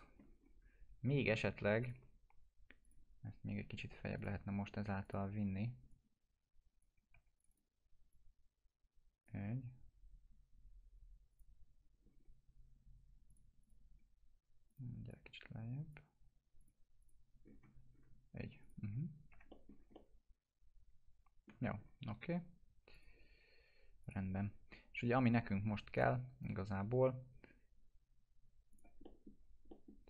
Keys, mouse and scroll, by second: 0.0 alt+middle click, 0.4 scroll up 1, 1.8 click, 3.2 scroll up 1, 4.1 click, 4.6 scroll up 1, 5.0 click, 5.4 w, 5.9-6.8 click, 7.1 2, 7.4-9.3 drag, 12.0 scroll down 1, 13.3 click, 13.9 scroll up 1, 14.7-16.0 drag, 17.4 scroll down 1, 18.6 click, 18.8 F4, 19.5 middle click, 19.7 scroll down 1, 19.9-21.5 alt+middle click, 21.8 scroll up 1, 22.9 click, 28.7 click, 29.0 middle click, 29.3 scroll down 1, 29.7 middle click.